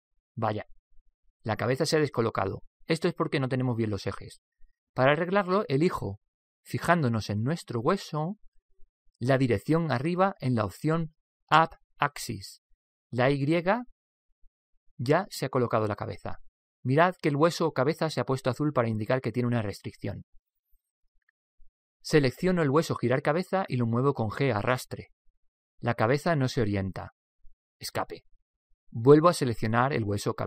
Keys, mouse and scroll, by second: 8.8-10.7 middle drag, 14.2 click, 16.9-18.9 middle drag, 23.6 right click, 24.8 Escape, 24.8 g, 25.0 g.